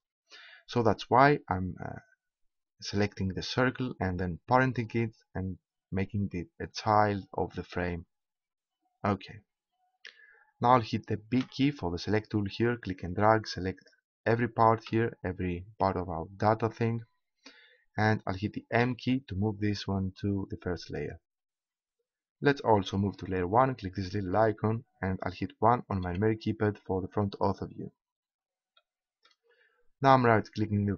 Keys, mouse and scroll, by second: 11.3 b, 18.8 m, 26.0 KP_1.